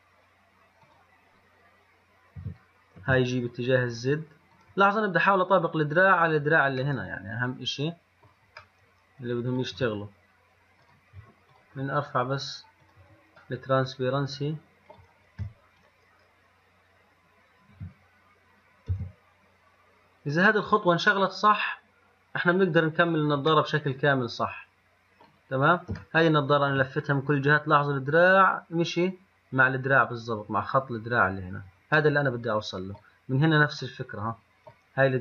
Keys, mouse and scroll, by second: 1.1 click, 2.6 g, 7.1-9.1 middle drag, 9.1-11.0 middle drag, 11.1 click, 11.8 click, 13.1 click, 13.9 middle click, 14.3-16.0 middle drag, 16.0 click, 18.0 g, 21.5-23.8 middle drag, 23.9 middle click, 24.4-26.3 middle drag, 31.7-32.3 middle drag, 34.7-35.2 middle drag.